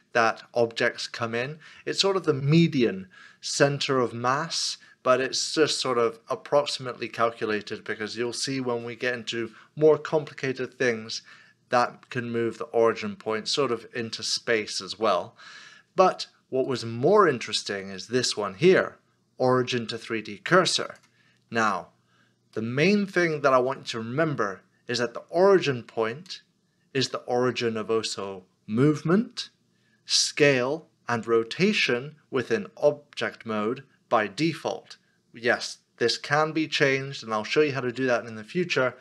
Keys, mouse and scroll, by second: 4.7 middle click, 16.7 right click, 22.6 right click, 22.6 middle click.